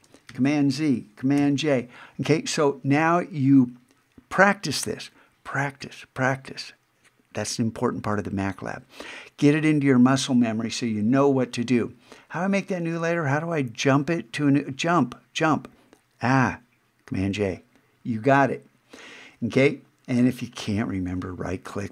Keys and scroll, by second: 0.3 super+z, 1.4 super+j.